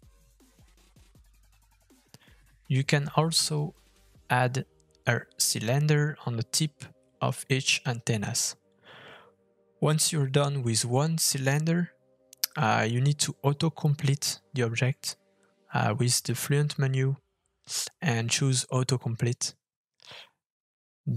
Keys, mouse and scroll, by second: 3.3 middle click, 4.0 scroll up 2, 4.2 shift+middle click, 5.5 f, 7.1 middle click, 10.4 middle click, 10.6-11.1 scroll down 3, 10.9 middle click, 11.3 shift+middle click, 11.5 scroll up 2, 11.7 shift+middle click, 14.1 middle click, 15.3 scroll down 2, 15.6 shift+middle click, 16.1 middle click, 16.2-16.6 scroll up 2, 16.4 middle click, 16.7 shift+middle click, 18.1 middle click, 19.2 KP_1, 19.5 g, 20.0 KP_3, 20.2 shift+middle click, 20.2 scroll up 3, 20.3 shift+middle click, 20.5 g.